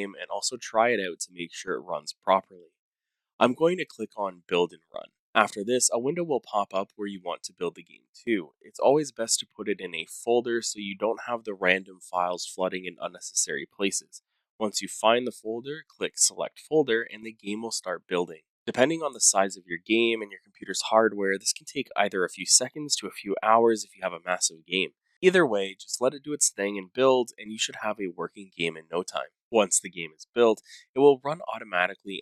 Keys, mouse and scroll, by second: 4.1 click, 5.2 click, 5.2 right click, 5.2 click, 6.0-7.6 typing, 8.2 Return, 13.3 click, 16.1 click, 18.5 click, 25.8 click, 27.0 click, 27.9 w, 29.7-32.2 typing, 31.5 click.